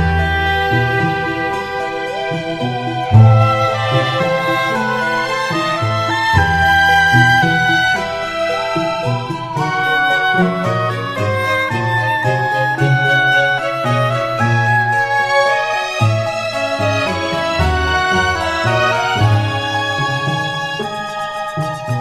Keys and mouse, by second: 0.0 right click, 1.6 middle click, 4.5 middle click, 6.7 middle click, 7.9 middle click, 8.8 middle click, 9.8 middle click, 11.1 middle click, 12.8 middle click, 13.6 middle click, 15.5 middle click, 17.6 middle click, 19.7 right click.